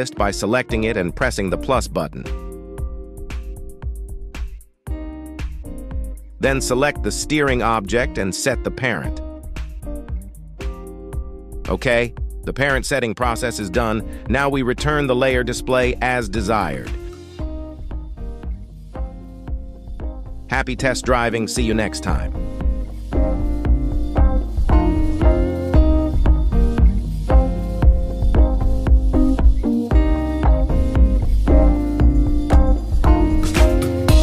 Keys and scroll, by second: 0.4 Escape, 7.0 ctrl+Tab, 11.6 ctrl+Tab, 19.2 g, 19.5 y, 21.7 Escape, 22.9 g, 23.8 Escape, 25.2 r, 28.0 Escape, 29.6 r, 32.0 Escape, 33.3 r.